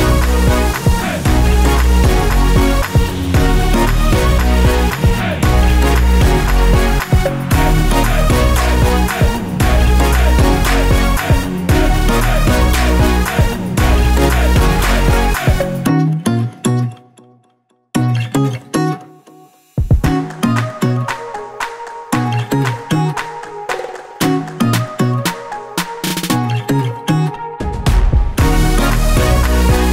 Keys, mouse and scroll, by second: 0.8 click, 2.3 F8, 3.4 ctrl+a, 4.5 Caps_Lock, 5.2-6.9 typing, 8.0-11.7 typing, 12.5 scroll down 1, 15.0 click, 16.4 click, 17.7 ctrl+z, 18.6 ctrl+z, 19.5 click, 20.6 click, 20.8 double click, 21.8 click, 22.5-24.1 typing, 25.4 typing, 25.4 click, 26.8 ctrl+z, 28.9 click.